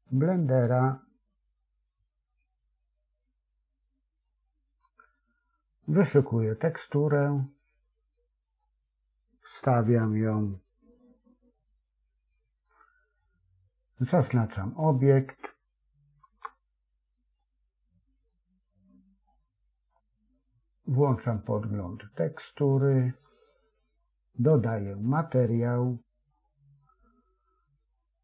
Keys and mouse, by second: 13.1-15.1 middle drag, 16.2 Tab, 22.5 click, 26.6 click, 27.8 click.